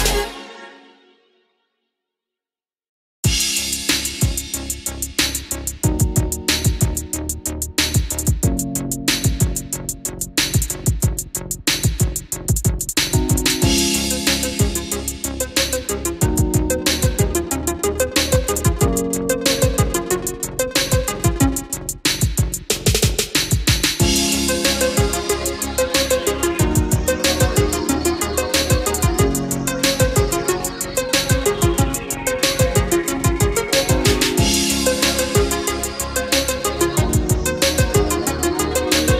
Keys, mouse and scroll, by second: 5.1-5.7 scroll up 1, 6.5-9.7 drag, 14.1-16.5 middle drag, 16.5 click, 17.0-19.8 middle drag, 20.2 click, 25.0 middle click, 26.4-27.1 scroll up 1, 27.3 click, 32.7-33.1 scroll down 1, 33.5 scroll up 1, 34.5 click, 39.1 F8.